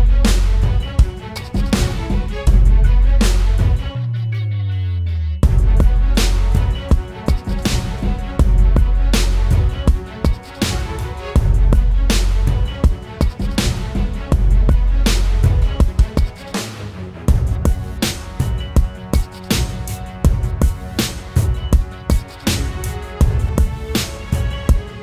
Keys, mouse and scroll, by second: 0.5 right click, 1.8 double click, 22.6-23.5 typing, 23.9 double click.